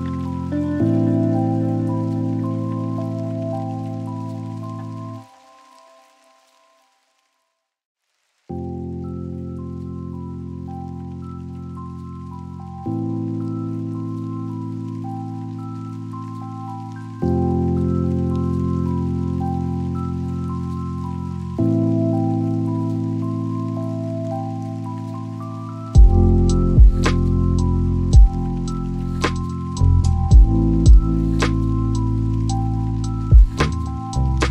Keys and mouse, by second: 1.9 click, 9.2 click, 15.7 click, 18.7 click, 21.9 p, 25.1 click, 26.4 click, 30.9 BackSpace, 32.1 o.